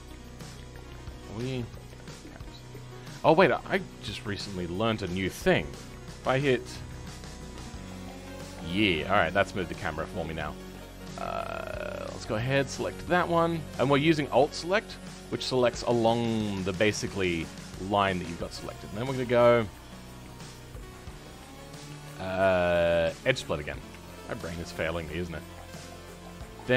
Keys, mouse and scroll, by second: 0.3-1.3 middle drag, 1.3 KP_7, 1.5-2.0 scroll down 3, 2.0-6.8 ctrl+middle drag, 6.8 KP_Decimal, 7.7-8.8 middle drag, 8.8-9.2 scroll up 2, 9.2-10.6 middle drag, 10.6-11.3 scroll up 2, 11.3-12.7 shift+middle drag, 12.7 alt+shift+click, 13.1-13.6 scroll down 2, 13.6-16.2 middle drag, 16.2-16.6 scroll down 2, 16.6-18.0 shift+middle drag, 18.0-18.4 scroll up 1, 18.4-23.2 shift+middle drag, 23.5-23.8 scroll down 2, 23.8 Tab, 24.1-26.7 middle drag.